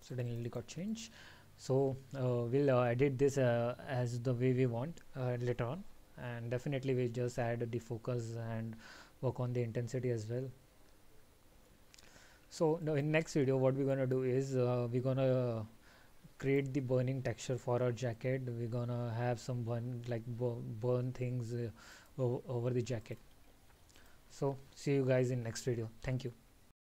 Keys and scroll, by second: 12.9 alt+?, 22.0 alt+t.